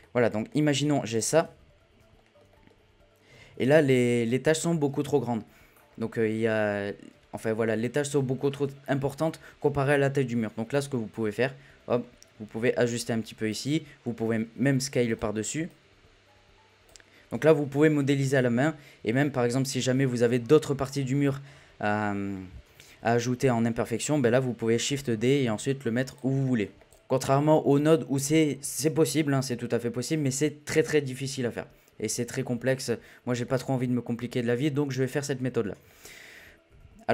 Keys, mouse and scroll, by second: 0.0-0.5 shift+middle drag, 0.5 scroll up 1, 0.8 middle click, 1.1-1.6 drag, 1.6 z, 2.0 scroll down 1, 2.1-3.3 shift+middle drag, 3.3 a, 3.8 click, 4.3-9.0 middle drag, 17.4 z, 18.0-18.3 middle drag, 18.3 click, 19.1 scroll down 3, 19.3-22.6 middle drag, 22.6 z, 23.3-23.9 scroll up 1, 23.9 KP_1, 25.3 shift+d, 26.4-26.8 shift+middle drag, 26.8 click, 27.1-29.1 scroll down 1, 29.1-30.3 scroll down 1, 33.4-35.1 middle drag, 35.1-35.9 scroll up 1, 35.9 shift+middle click, 36.7 KP_7.